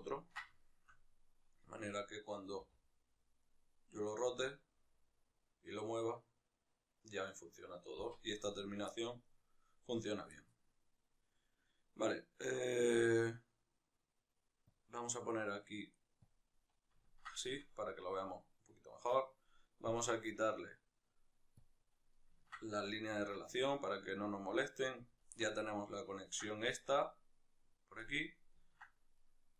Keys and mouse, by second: 1.5-2.5 right drag, 2.5 r, 3.3 right click, 4.1 g, 7.2 right click, 7.9 z, 8.7-9.7 middle drag, 9.7-16.0 right drag, 16.0-16.8 drag, 16.8-21.3 ctrl+shift+middle drag, 21.3-21.8 drag, 21.8-28.9 middle drag, 28.9 right click, 29.3 right click.